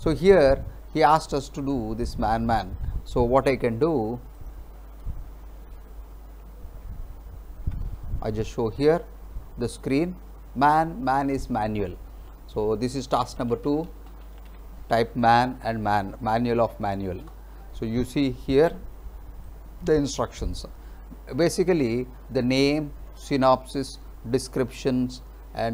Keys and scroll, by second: 7.2 alt+Tab, 13.2-15.1 typing, 17.3 Return.